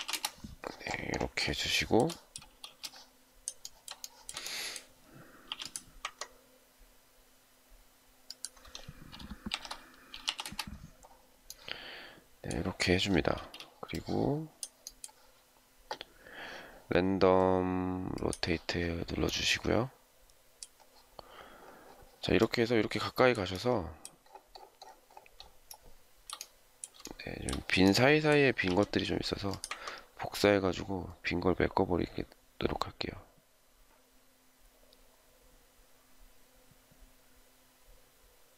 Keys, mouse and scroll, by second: 0.0-0.4 typing, 1.6 shift+middle click, 2.6 space, 3.9 shift+middle click, 5.4 m, 9.2-10.7 typing, 13.2 space, 25.3 shift+scroll down 1, 25.6 shift+middle click, 28.5 m.